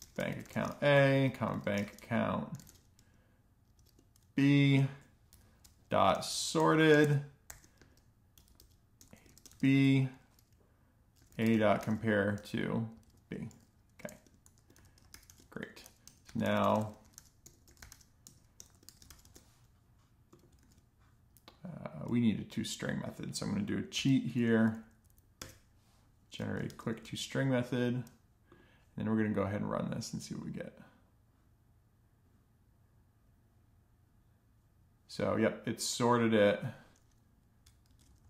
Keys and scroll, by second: 0.0-3.8 typing, 4.9 Right, 5.2-9.6 typing, 10.9-18.8 typing, 13.5 Tab, 15.2 alt+shift+f, 15.5 Return, 19.0 alt+shift+f, 19.1 alt+shift+f, 20.5 super+s, 23.8 super+., 24.5 Down, 24.7 Down, 24.8 Down, 25.0 Down, 25.3 Return, 26.5 alt+shift+f, 26.9 super+s, 37.7 super+x, 37.9 Left, 38.0 Left, 38.2 Left.